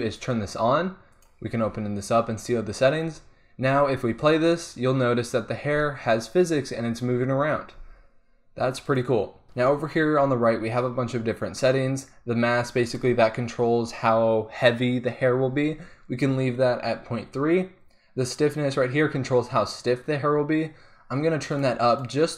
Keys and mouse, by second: 0.1-3.1 drag, 3.1-3.8 middle drag, 3.8 alt+a, 7.2 click, 7.9 alt+a, 8.8-9.4 drag, 21.6-22.3 drag.